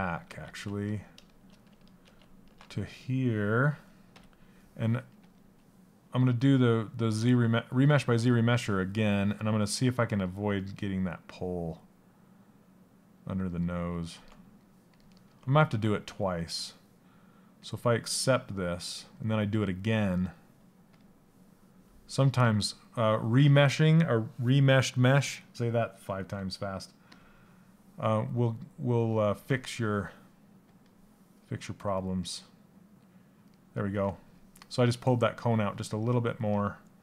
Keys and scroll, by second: 1.6 ctrl+z.